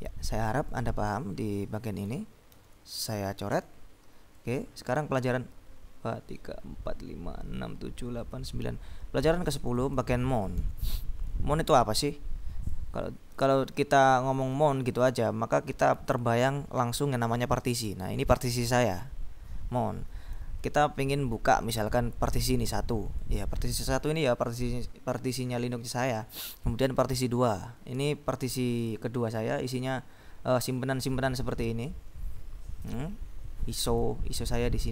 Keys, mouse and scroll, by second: 0.9-2.4 drag, 2.7 ctrl+b, 3.6 s, 4.4 click, 9.4-10.6 drag, 10.7 ctrl+b, 12.3-13.4 drag, 14.6-15.9 drag, 23.3 click, 26.3-26.8 scroll down 2, 27.4 click, 30.1-30.7 scroll down 2, 30.7-31.5 scroll up 1, 31.5-32.0 scroll up 1, 33.9 click.